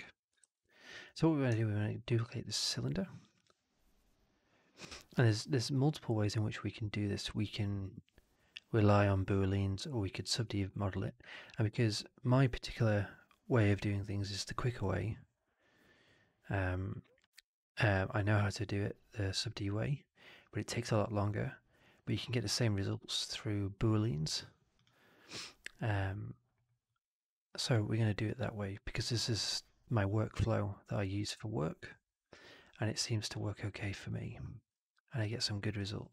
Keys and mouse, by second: 0.3 shift+x, 1.5-2.0 alt+middle drag, 2.1-2.4 alt+right drag, 3.3-5.9 drag, 35.1 click, 35.7-36.1 drag.